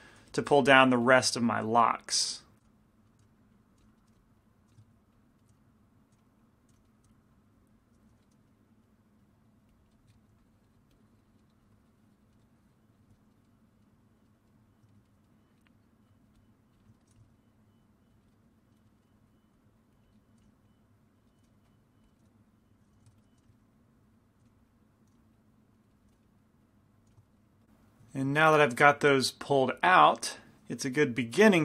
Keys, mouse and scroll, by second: 0.4-7.1 typing, 2.9-7.1 drag, 3.1 right click, 4.0 right click, 4.9 right click, 5.1-6.2 middle drag, 6.9-8.2 middle drag, 7.4-8.5 drag, 8.2 i, 8.5 middle click, 9.8-12.4 drag, 9.8-12.3 middle drag, 12.4-16.0 middle drag, 12.6-14.9 drag, 16.0-17.2 drag, 17.0-18.0 middle drag, 17.2 f, 17.7 click, 18.4-20.2 middle drag, 19.6-21.4 drag, 20.5-27.1 typing, 21.3 middle click, 21.7-23.5 drag, 22.2 middle click, 23.6 middle click, 23.8-26.1 drag, 25.8-27.1 middle drag, 26.7 click, 27.3 middle click, 27.8-31.6 middle drag.